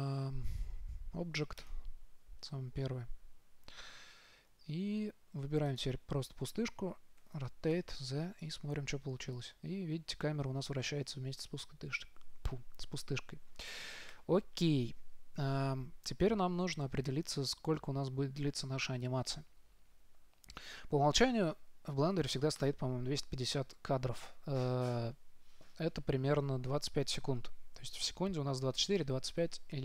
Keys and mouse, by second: 6.0-8.1 right drag, 7.5 r, 21.5-25.3 drag.